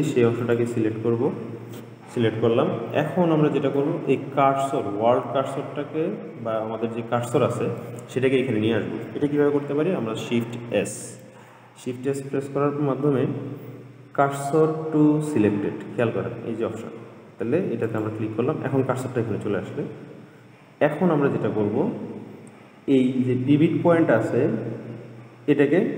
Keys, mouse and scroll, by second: 0.6 click, 3.4-6.5 middle drag, 11.0 shift+s.